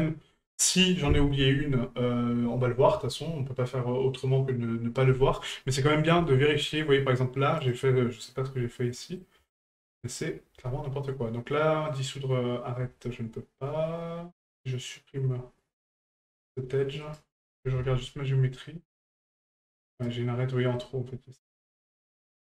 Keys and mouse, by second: 0.0-5.8 middle drag, 6.2 shift+middle drag, 7.6 right click, 8.9-9.2 middle drag, 9.5 shift+middle drag, 17.0 right click, 20.8 middle click.